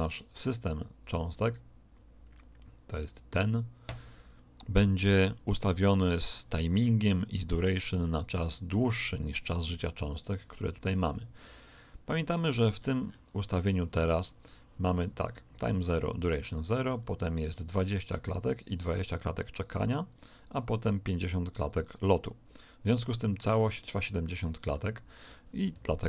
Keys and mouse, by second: 2.3 click, 9.3 right click, 12.7-14.9 middle drag, 14.4 click, 16.9 click, 20.1 click, 24.3-26.0 middle drag, 25.7 alt+a.